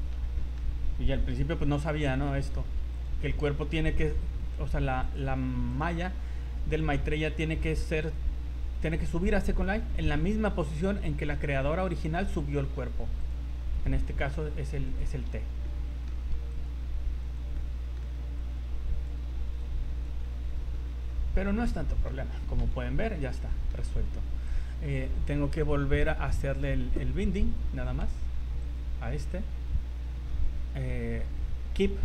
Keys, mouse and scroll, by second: 0.4 middle click, 1.3 KP_1, 1.6 z, 1.9 scroll up 3, 2.2 shift+middle click, 2.9 right click, 3.9 g, 5.7 right click, 6.1 g, 7.1 right click, 8.0 right click, 8.4 g, 9.5 right click, 10.1 right click, 10.5 g, 12.0 right click, 12.5 g, 13.7 right click, 14.1 g, 15.3 z, 15.6 middle click, 16.5 right click, 17.2 right click, 17.5 middle click, 18.4 click, 19.6 click, 20.3 middle click, 20.8-21.3 scroll down 7, 21.2 Tab, 21.3 middle click, 21.8 shift+scroll down 1, 21.9 shift+middle click, 22.6 KP_1, 23.1 scroll down 2, 23.5 shift+middle click, 24.5 right click, 26.0-27.0 scroll up 18, 28.6 shift+right click, 30.2-30.9 scroll down 15.